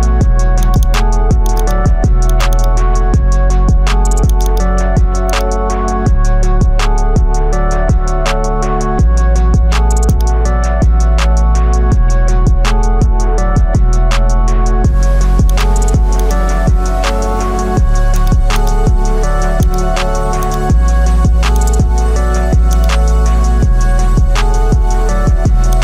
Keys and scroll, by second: 24.5 ctrl+t.